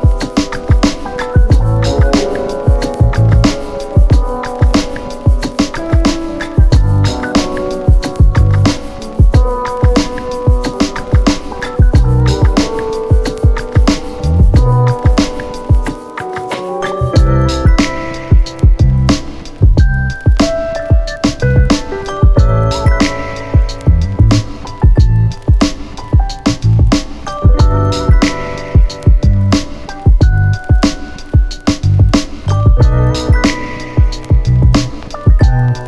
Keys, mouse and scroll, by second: 0.0 click, 6.1-7.9 click, 9.2 p, 9.7 p, 11.1-15.3 click, 31.8-33.3 click, 34.2 space.